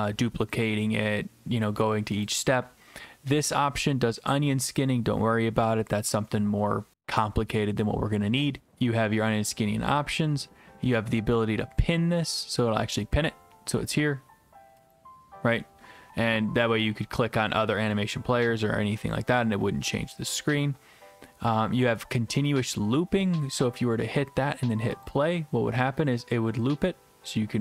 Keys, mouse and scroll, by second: 2.3-3.3 drag, 12.9-13.9 drag, 14.9 click, 22.5 click, 25.1 click.